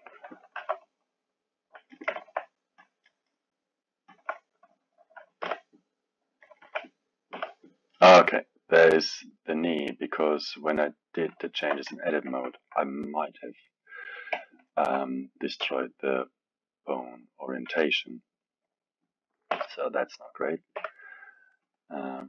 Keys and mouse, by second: 0.5 r, 2.2-2.8 alt+middle drag, 2.8 click, 4.2 Left, 5.4 g, 6.6 KP_1, 7.3 g, 11.4-14.3 alt+middle drag, 14.3 KP_3, 14.7-15.6 alt+middle drag, 15.6 g, 17.6 KP_1, 19.5 r, 20.8 g, 22.2 click.